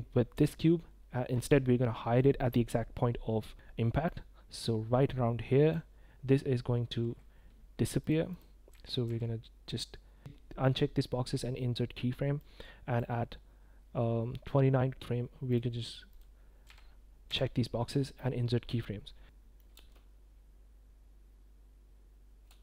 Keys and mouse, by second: 4.1 click, 8.0 click, 8.3 click, 8.7 i, 9.1 i, 12.4-13.0 drag, 15.3-16.1 drag, 16.1 i, 16.5 i, 17.9 click, 18.8 drag, 19.1 space, 19.2-19.6 drag, 19.2 space, 19.7 space, 22.5 space.